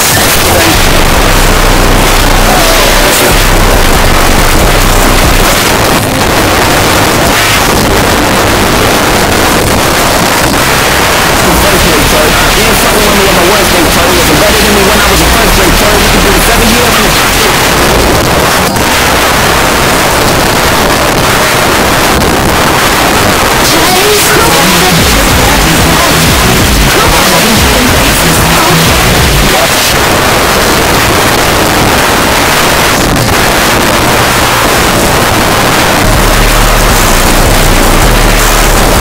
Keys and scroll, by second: 5.5 Page_Down, 17.5 Page_Down, 29.7 Page_Down.